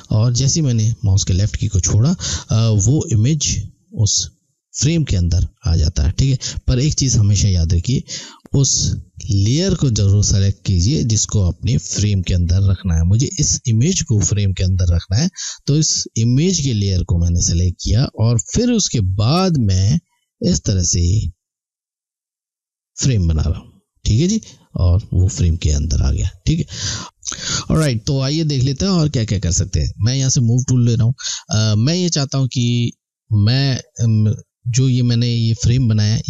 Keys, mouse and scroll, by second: 6.8 ctrl+z, 18.5 click, 30.2 click.